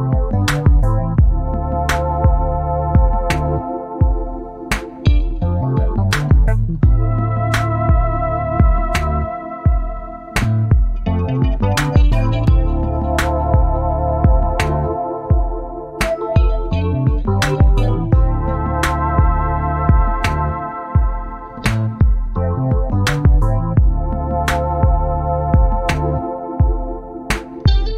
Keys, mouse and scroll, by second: 1.4 shift+click, 3.0 ctrl+d, 4.6 shift+click, 5.3 shift+click, 6.7 click, 9.3-15.6 drag, 16.5 click, 17.0-20.6 drag, 21.4 click, 22.2 click, 22.8 click, 23.6 click, 26.5 click, 27.2 click.